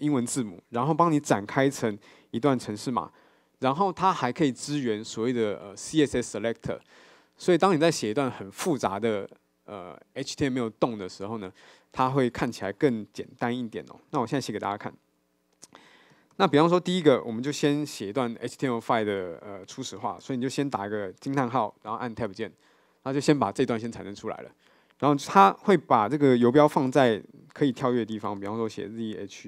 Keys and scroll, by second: 16.1 super+a, 22.7 Tab.